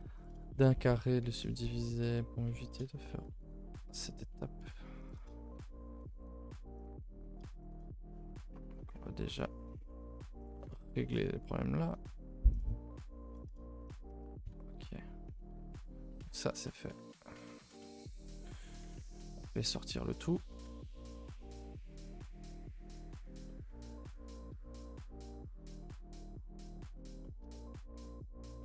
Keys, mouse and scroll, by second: 16.8 click, 23.4 middle click, 24.1 scroll up 2, 24.5 KP_1, 24.7 KP_1, 25.2 KP_3, 25.7-26.6 scroll up 7, 26.1 shift+middle click, 26.6 shift+middle click, 26.9 scroll up 1, 27.2-28.6 shift+middle drag.